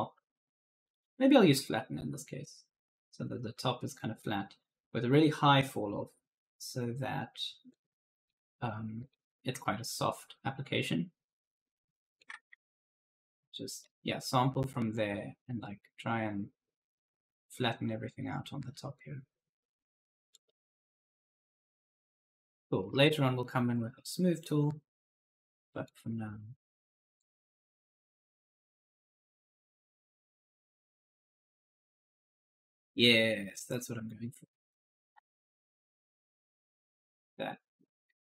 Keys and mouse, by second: 0.7 click, 1.3 right click, 7.5 click, 10.2 shift+click, 12.8 click, 14.8 click, 20.2-22.6 typing, 20.3 right click, 23.2 click, 27.0 click, 28.1 click, 30.3 right click, 30.5 q, 31.6-36.5 typing, 31.8 right click, 35.3 right click.